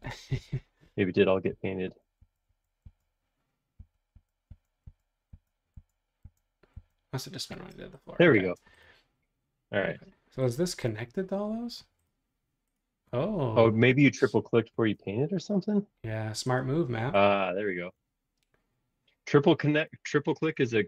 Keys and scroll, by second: 2.2 super+z, 2.9 super+z, 3.7 super+z, 4.8 super+z, 5.3 super+z, 6.2 super+z, 6.7 super+z.